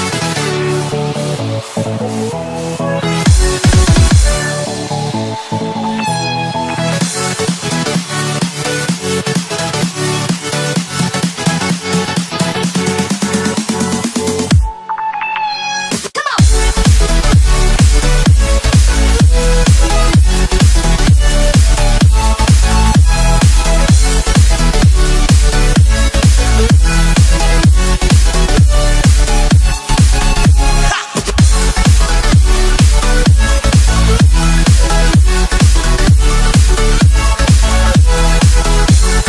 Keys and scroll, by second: 5.6 ctrl+z, 7.2 ctrl+z, 12.6 ctrl+z, 18.2 ctrl+z, 18.9 ctrl+z, 19.8 ctrl+z, 20.7 ctrl+z, 28.9 ctrl+z, 29.4 ctrl+space, 29.6 ctrl+space, 30.2 ctrl+space, 30.6 ctrl+shift+z, 31.1 ctrl+space, 31.4 ctrl+space, 31.8 ctrl+0, 39.0 ctrl+c.